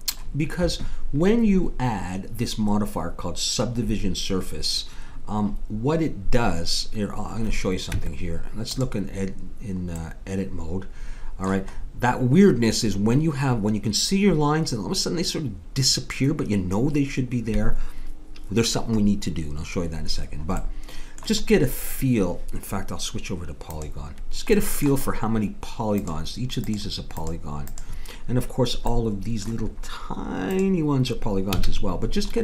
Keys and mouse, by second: 7.9 Tab, 11.4-17.8 middle drag, 20.6-23.6 middle drag, 23.6-29.3 drag, 29.3 middle click, 30.5-32.3 drag, 31.6 a.